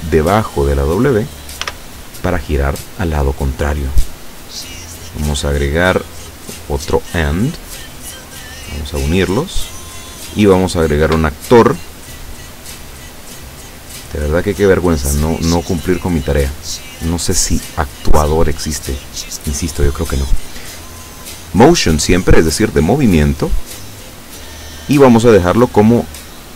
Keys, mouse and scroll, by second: 0.8 click, 1.7 s, 4.7 click, 5.9 click, 6.8 click, 8.0-9.0 drag, 10.7 click, 12.5-13.9 drag, 14.6 click, 21.6 click, 23.1-24.2 drag, 25.8-26.5 drag.